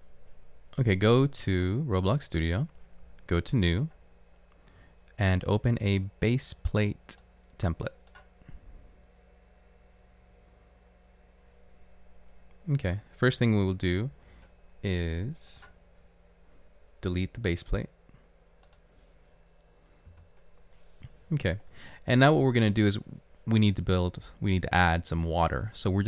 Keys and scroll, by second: 20.1 Delete.